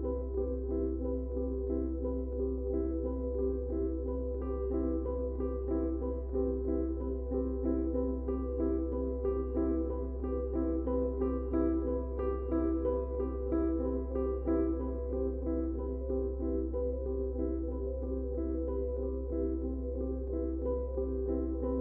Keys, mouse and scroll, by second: 0.5 space, 0.5 click, 1.0 space, 1.5 click, 5.5 Tab, 7.3 click, 20.0 click.